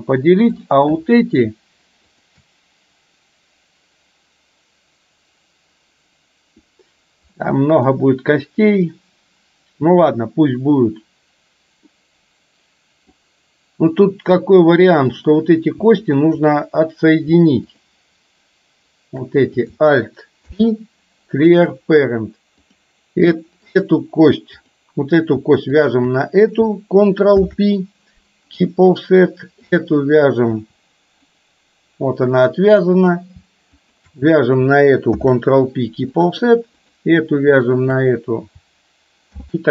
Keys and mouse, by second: 0.7 click, 2.2 shift+click, 11.9-13.2 middle drag, 15.2 click, 16.2 shift+click, 17.8 shift+click, 20.5 ctrl+p, 22.7 click, 23.8 click, 24.5 click, 27.4 ctrl+p, 29.7 click, 31.4-33.2 drag, 35.3 ctrl+p, 36.8 click, 39.4 ctrl+p.